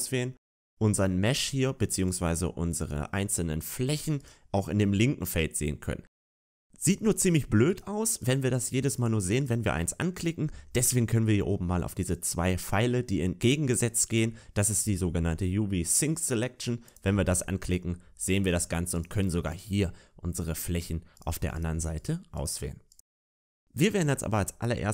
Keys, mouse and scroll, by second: 1.9 right click, 3.1 middle click, 4.1 right click, 5.5 middle click, 8.1 right click, 8.8 right click, 9.2 right click, 18.8 click, 18.8 right click, 19.4 right click, 21.0 right click, 21.4 right click, 21.8 right click, 22.8 right click, 23.5 a, 23.6 a.